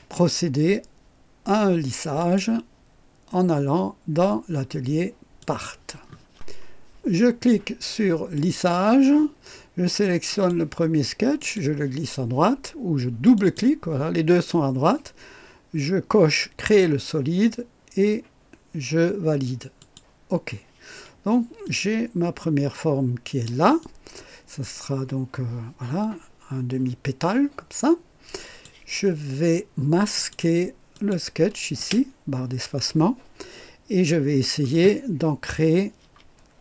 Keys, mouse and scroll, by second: 2.2 click, 5.4 click, 8.4 click, 10.3 click, 11.4 click, 13.3 click, 16.6 click, 19.8 click, 21.7-23.6 drag, 23.8-28.8 drag, 30.2 click, 31.0 click, 31.8 space.